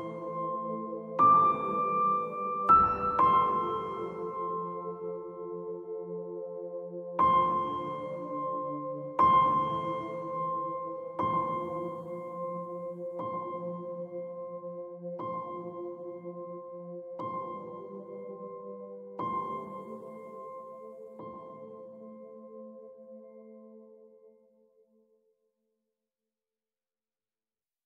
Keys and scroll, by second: 25.3 F4.